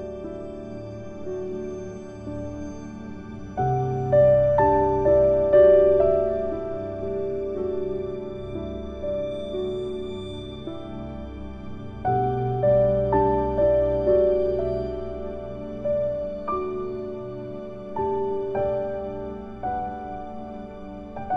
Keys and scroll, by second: 6.6 ctrl+shift+q.